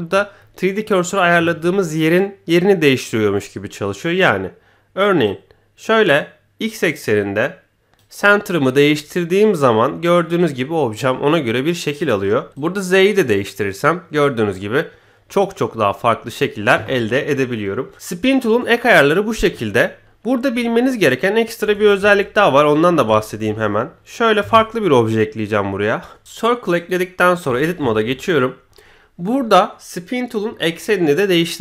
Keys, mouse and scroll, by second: 5.2-8.0 drag, 10.3-12.0 drag, 12.5-15.3 drag, 15.7-16.3 scroll down 1, 16.3 scroll down 1, 20.6-21.1 middle drag, 21.6 Tab, 22.0 a, 22.3 x, 23.1 shift+middle drag, 23.5 middle click, 23.5 scroll up 1, 24.4 shift+a, 26.2 click, 26.7 click, 27.2 scroll up 2, 27.5 Tab, 27.9 shift+middle click, 28.1-28.4 middle drag, 28.6 scroll up 1, 28.8 middle click, 29.7 middle click.